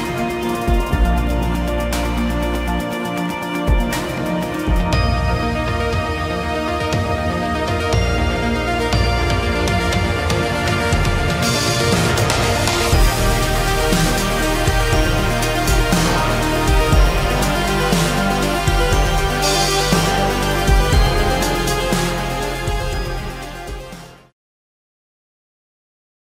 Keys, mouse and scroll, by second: 0.9-2.3 typing, 4.2 Return, 8.0 shift+middle click, 11.3 ctrl+a, 14.5 shift+middle click, 15.5 space, 16.3 shift+middle click, 19.4 shift+middle click, 22.3 shift+middle click.